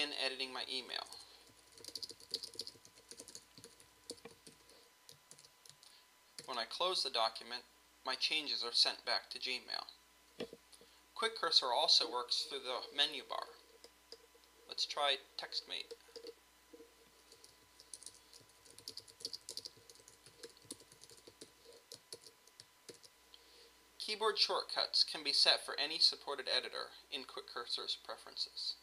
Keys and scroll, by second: 0.6 super+Down, 1.0 Return, 4.4 shift+1, 5.3 super+s, 6.4 super+w, 17.6 super+Down, 17.9 Return, 20.7 shift+m, 21.4 shift+1, 22.1 super+s, 22.9 super+w.